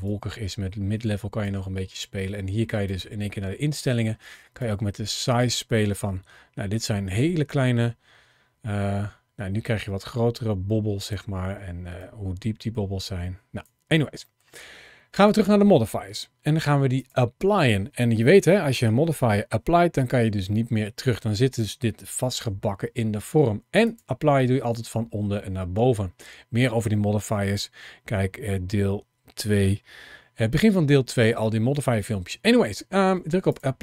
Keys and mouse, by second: 2.7 click, 4.4-11.0 drag, 11.8-13.5 drag, 14.1 middle click, 15.1 click, 16.8 click, 22.1 shift+middle click, 23.7-33.5 drag.